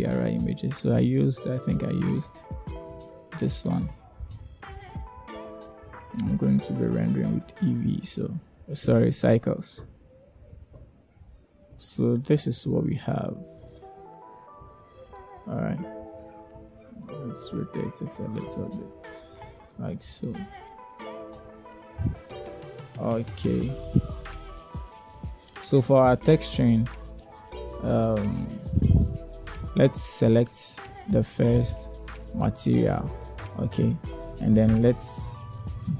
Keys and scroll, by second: 13.9 0, 17.8 r.